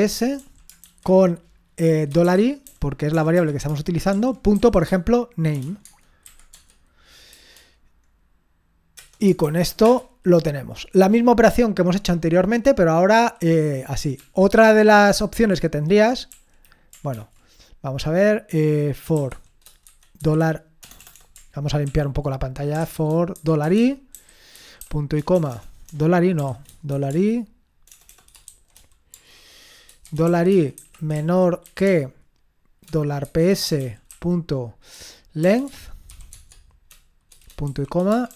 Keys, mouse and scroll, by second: 0.0-6.7 typing, 5.9 Tab, 9.0 Return, 9.4 typing, 9.8 Return, 14.2 ctrl+p, 16.3 Up, 17.2 ctrl+c, 19.1-21.1 typing, 21.9 ctrl+l, 22.5-36.3 typing, 37.7-38.3 typing.